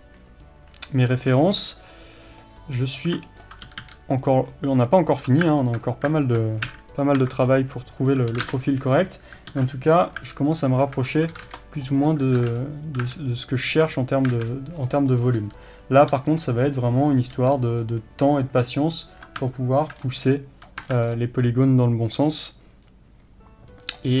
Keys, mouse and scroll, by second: 2.9 click, 3.7 g, 5.7 alt+click, 6.7 KP_1, 8.3 s, 9.0 click, 9.6 alt+a, 9.9-10.6 scroll up 1, 10.9 alt+click, 11.3 s, 12.4 alt+a, 12.6 scroll up 1, 13.1 scroll down 1, 13.2 Tab, 14.4 alt+a, 14.5-14.8 scroll up 1, 15.2 click, 15.4 g, 16.0 click, 16.2 g, 17.2 click, 17.4 g, 17.9-24.2 middle drag, 20.0-20.4 scroll down 1, 20.9-21.5 scroll down 2.